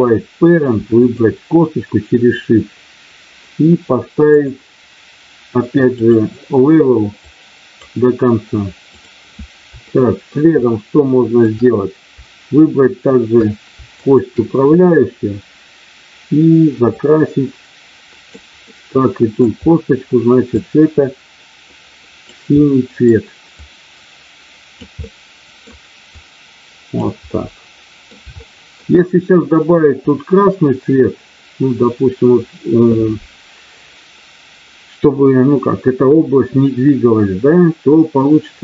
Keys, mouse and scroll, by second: 0.8 shift+click, 4.3-6.3 drag, 7.4-10.5 drag, 14.0 shift+click, 16.9-18.2 drag, 18.6 middle click, 20.5-22.2 drag, 22.5 middle click, 23.5-24.7 drag, 25.0 middle click, 26.2 click, 27.4 middle click, 28.2 shift+middle click.